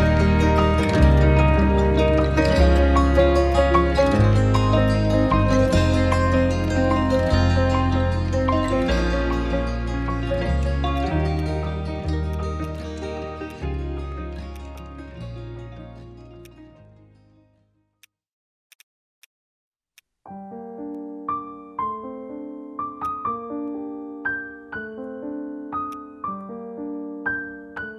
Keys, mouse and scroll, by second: 0.0 right click, 1.1 double click, 1.6-2.0 typing, 2.1 Return, 11.4 alt+click, 12.3 alt+click, 12.9 alt+middle click, 13.2 scroll down 1, 14.7 right click, 16.7 scroll down 1, 17.5-17.9 scroll up 1, 19.5 alt+middle click.